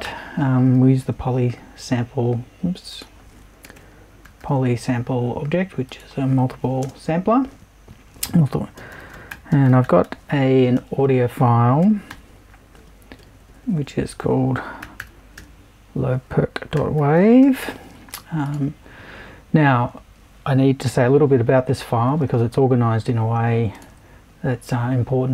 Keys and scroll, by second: 0.0-1.5 typing, 3.6-4.9 typing, 6.8 space, 8.7-10.7 typing, 11.8 shift+., 12.1 shift+w, 13.2 shift+BackSpace, 15.0 r, 15.4 c, 16.7-17.9 typing.